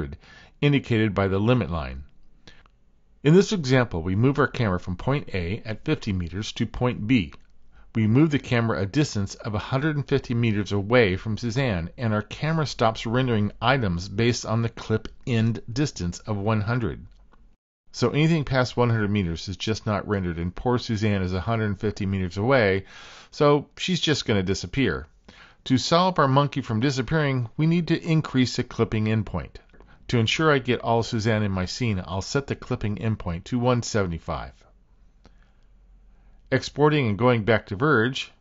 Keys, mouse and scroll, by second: 30.3-33.1 drag, 35.0 typing, 36.4-38.4 drag.